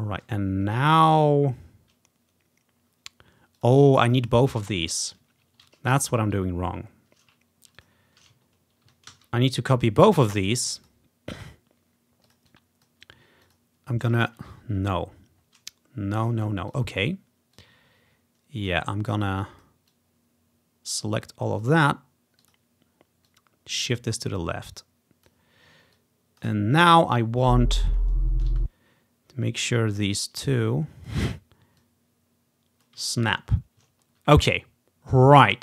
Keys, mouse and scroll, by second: 0.7-1.3 ctrl+scroll up 2, 1.1 ctrl+z, 3.6 click, 4.2 click, 4.4 click, 5.7 ctrl+z, 6.0 ctrl+z, 7.8 shift+click, 8.5 ctrl+scroll down 1, 9.2 ctrl+d, 10.3 click, 12.0 scroll down 1, 14.3 ctrl+z, 15.2-16.2 scroll down 1, 16.8-18.0 drag, 18.8 click, 19.3 click, 19.7 click, 20.0-25.4 drag, 26.0 click, 27.1-28.3 ctrl+scroll up 2, 28.3 ctrl+scroll down 1, 28.7 space, 29.1 scroll down 1, 29.8-34.0 drag, 33.2-33.6 ctrl+scroll down 1, 33.6-33.9 scroll up 1, 34.0-35.6 ctrl+scroll down 1.